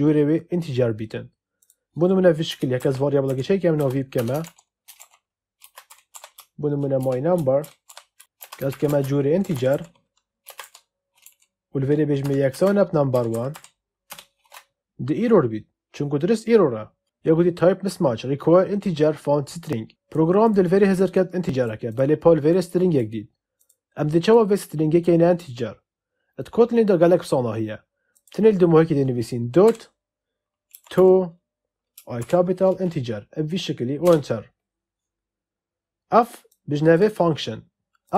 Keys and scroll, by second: 2.4 Return, 2.7-10.4 typing, 10.5 Right, 12.1 =, 12.4 space, 13.1 n, 13.4 m, 14.0 Return, 29.6 ., 30.6 t, 30.9 o, 32.1 shift+i, 33.9 Return.